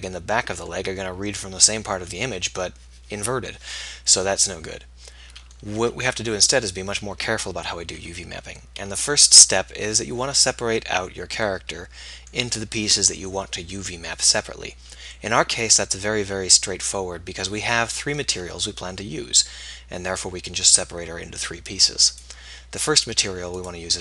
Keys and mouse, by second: 5.8 Tab, 22.0 click, 23.9 Tab, 23.9-24.0 drag.